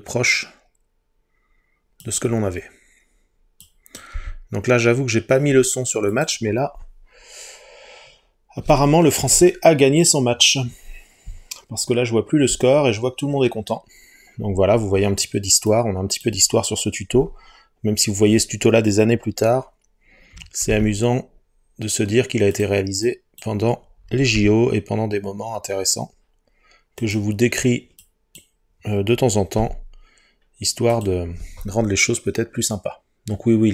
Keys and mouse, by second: 2.1 click, 3.7 click, 4.2 g, 6.1-7.3 drag, 15.7 click, 20.7 g, 22.6 click, 23.1 click, 24.4 g, 27.0 click, 29.6 g, 31.0 click.